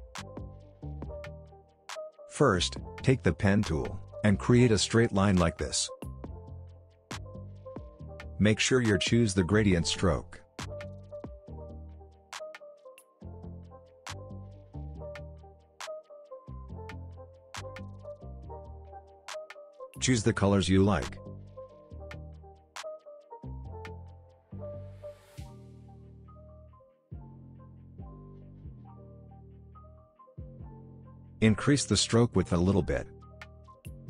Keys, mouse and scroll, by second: 0.8-1.5 scroll down 1, 1.5-1.9 scroll up 1, 1.9-2.3 scroll down 1, 2.3-3.5 scroll up 1, 3.5 click, 6.4 click, 7.2 shift+click, 11.9-12.5 drag, 19.3-22.5 drag, 28.7 alt+scroll down 1, 29.3 alt+scroll up 1, 29.7 alt+scroll down 1, 30.0-34.0 drag.